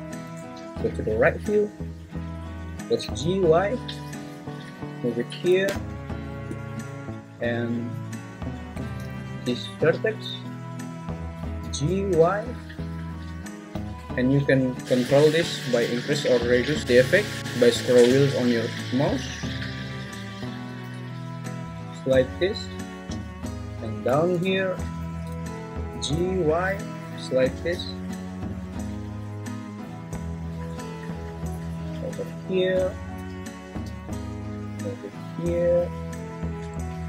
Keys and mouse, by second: 0.4 `, 3.0 g, 3.2 y, 11.6 g, 11.8 y, 25.9 g, 26.1 y, 33.8 g, 34.1 y.